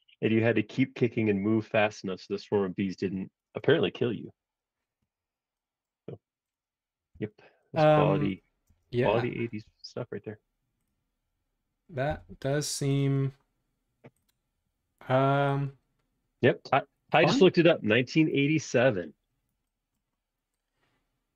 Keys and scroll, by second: 3.6 space, 7.1 b, 8.6 space, 9.6 super+z, 12.1 b.